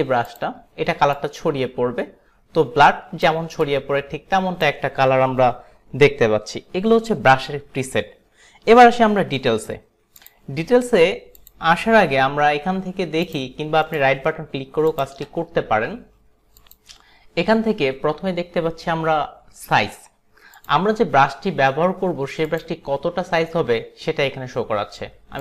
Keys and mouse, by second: 0.4 click, 1.2 click, 3.8 click, 11.4 click, 13.9 right click, 15.0 click, 16.7 click, 20.7 click, 22.5 click.